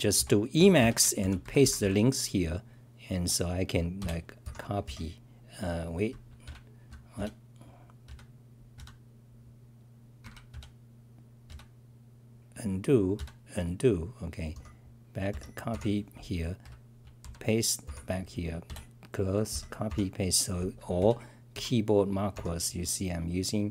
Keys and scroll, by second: 0.0-2.3 typing, 3.1-4.4 scroll, 4.8 ctrl+l, 7.2 f, 8.0 f, 8.7 f, 10.2 Escape, 10.5 f, 11.5 f, 13.2 f, 16.7 t, 17.2 k, 21.0 Return, 21.5 k.